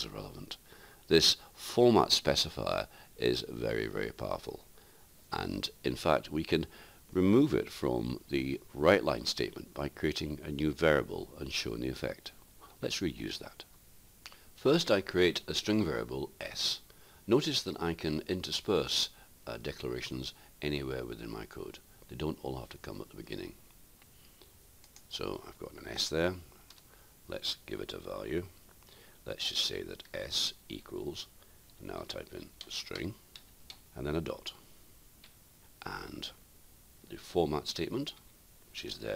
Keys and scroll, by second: 28.8-29.6 typing, 31.5-32.2 typing.